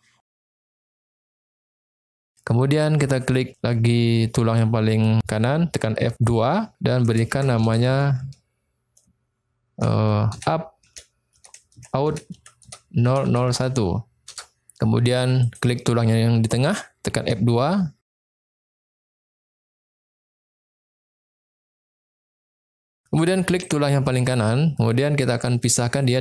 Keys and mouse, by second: 2.6 click, 5.7 F2, 13.3 0, 15.4 click, 17.2 F2, 21.1 0, 23.7 click.